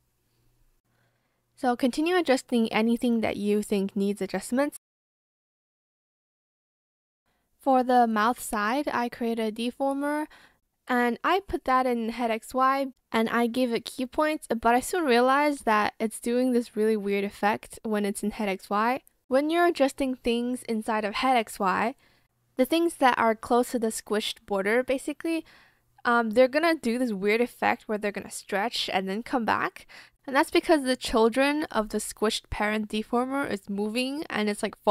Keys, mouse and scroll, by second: 0.5 Escape, 0.9 ctrl+shift+z, 0.9 shift+click, 1.1 shift+click, 1.3 ctrl+shift+z, 1.4 shift+click, 1.4 shift+click, 1.5 shift+click, 1.6 shift+click, 1.8 ctrl+z, 1.8 ctrl+z, 2.4 click, 2.4 b, 2.9 ctrl+shift+z, 2.9 shift+click, 3.0 shift+click, 3.4 shift+click, 3.6 ctrl+z, 3.6 shift+click, 3.8 shift+click, 3.9 ctrl+z, 4.2 click, 4.4 ctrl+z, 4.5 Escape, 5.1 shift+click, 5.4 ctrl+z, 5.5 ctrl+z, 5.7 shift+click, 5.8 ctrl+z, 5.9 shift+click, 6.1 shift+click, 7.3 shift+click, 8.7 shift+click, 9.1 shift+click, 10.5 BackSpace, 17.2 ctrl+z, 19.1 shift+click, 32.5 shift+click.